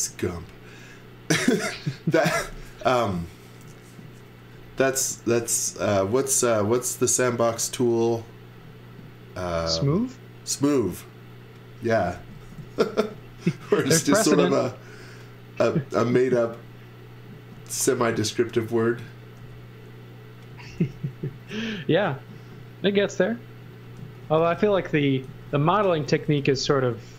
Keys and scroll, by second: 0.0 space, 11.6-13.5 typing, 17.5 x, 18.0 z, 19.4 b, 20.5 space, 20.8 s, 23.7-26.4 typing.